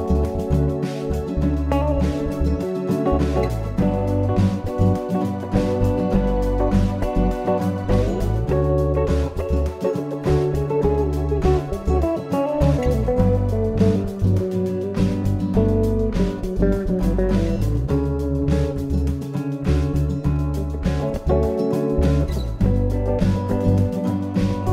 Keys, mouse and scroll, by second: 4.6 ctrl+r, 9.3 click, 10.3 click, 12.4 shift+click, 14.0 middle click, 18.4 e, 22.2 click.